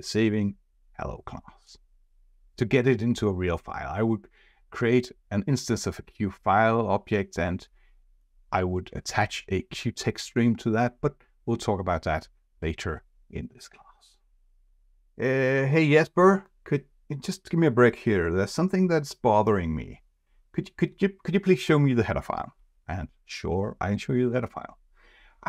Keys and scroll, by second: 23.9 F4.